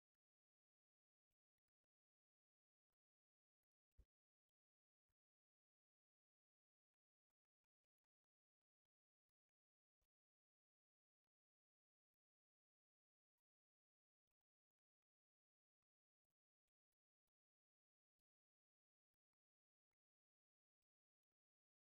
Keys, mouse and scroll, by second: 0.5 ctrl+click, 1.0 ctrl+click, 1.8 click, 8.9 click, 10.8 click, 11.0 click, 13.6 click, 13.7 click, 17.3 click, 18.4 click, 21.3 click.